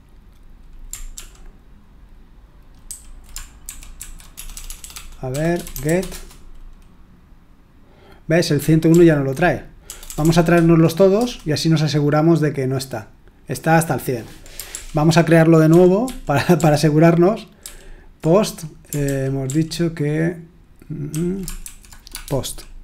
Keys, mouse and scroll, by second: 1.1 ctrl+p, 2.8 ctrl+a, 3.6 alt+f, 3.9 alt+f, 4.3-6.3 typing, 8.9 ctrl+p, 9.8 BackSpace, 10.0 BackSpace, 10.2 BackSpace, 11.1 Return, 14.7 ctrl+o, 15.7 ctrl+p, 16.0 ctrl+p, 16.5 ctrl+p, 17.6 ctrl+p, 19.0 ctrl+p, 19.4 ctrl+p, 21.1 ctrl+a, 21.6 alt+f, 22.1-22.8 typing.